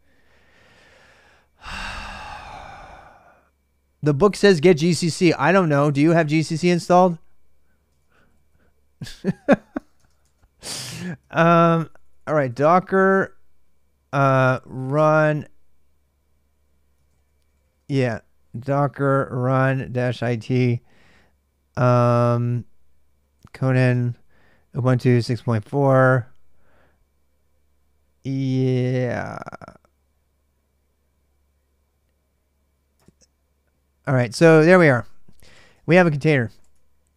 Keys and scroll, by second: 7.7-13.0 typing, 14.8-15.6 typing, 16.6-20.4 typing, 22.9-24.2 typing, 35.0-36.9 typing.